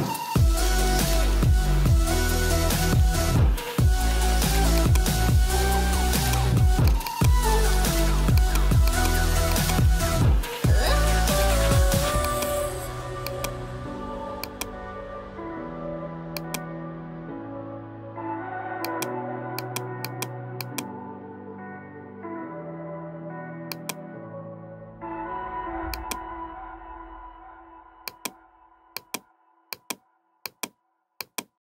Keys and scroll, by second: 18.0 [, 25.0 [.